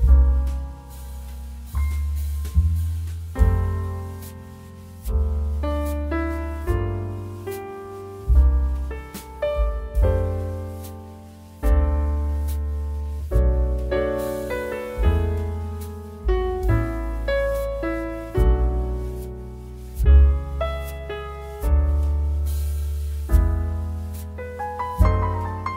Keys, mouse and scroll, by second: 2.3 click, 5.6 click, 5.6 typing, 8.6-21.9 drag, 8.6 typing, 22.5 scroll down 1, 24.1 click.